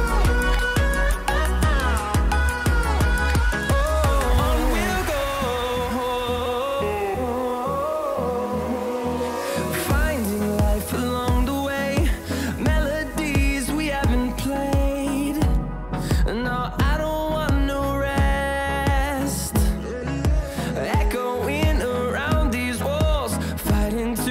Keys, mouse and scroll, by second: 0.8 shift+click, 7.0 scroll up 1, 8.5-10.1 scroll down 1, 10.2 click, 11.8 scroll up 1, 12.5 click, 13.4-13.8 scroll up 1, 13.8-14.7 scroll down 1, 14.7 scroll, 14.8-15.1 scroll up 1, 15.7-17.7 drag, 17.7 scroll down 1, 18.5-21.7 drag, 24.1 scroll, 24.1-24.3 scroll up 1.